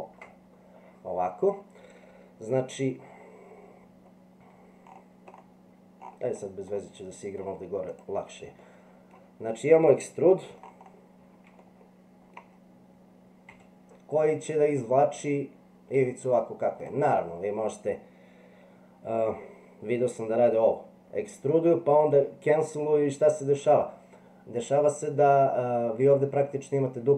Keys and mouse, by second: 6.8 middle click, 8.6 middle click, 11.6 shift+middle click, 13.5 e.